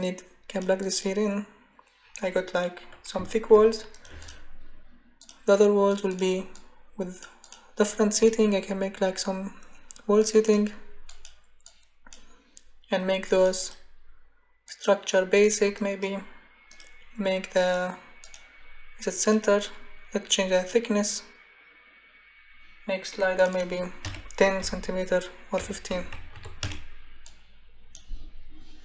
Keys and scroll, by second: 24.0 0, 24.6 ., 25.6 1, 26.3 5, 26.6 Return.